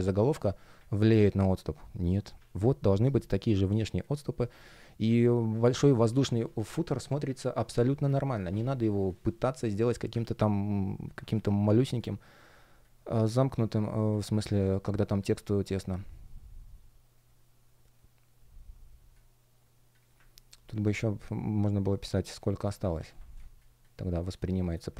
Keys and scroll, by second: 2.9 shift+p, 9.7 shift+Return, 11.6 space, 20.8 shift+p, 22.9 super+z, 23.3 space.